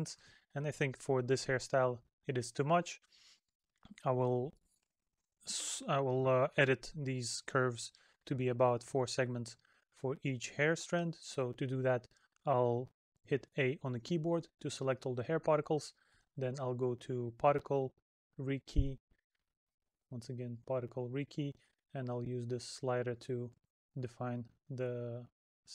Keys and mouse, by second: 6.3 middle click, 8.5 middle click.